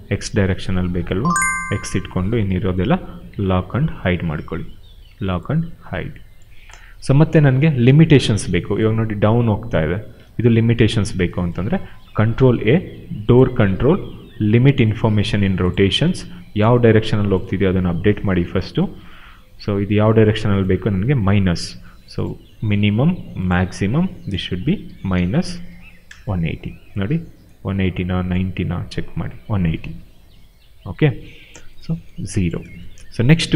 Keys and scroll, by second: 10.2 ctrl+z, 12.0 ctrl+a, 21.0 ctrl+z, 24.5-25.9 typing, 26.0 Return, 30.8 ctrl+a, 32.4 0, 32.5 Return.